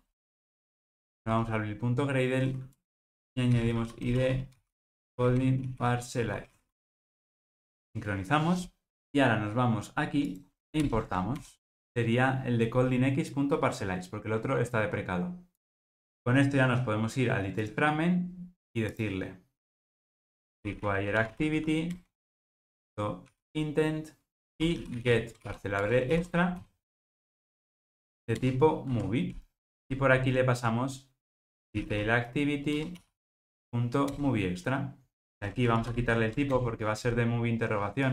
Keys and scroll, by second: 10.8 alt+Return, 22.0 Return, 25.9 Return, 32.9 Return, 35.8 alt+shift+Left.